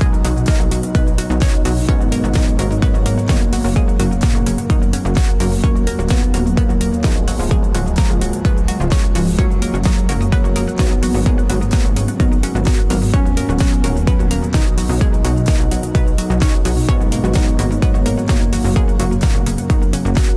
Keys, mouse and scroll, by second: 0.4-2.9 middle drag, 3.2 click, 4.4-7.0 drag, 7.1 click, 11.6 scroll down 2, 12.1-13.8 middle drag, 13.8-14.3 scroll up 5, 14.3-15.5 middle drag, 15.5-15.9 scroll down 1, 15.9-16.5 middle drag, 16.5 scroll down 3, 17.0-19.6 middle drag.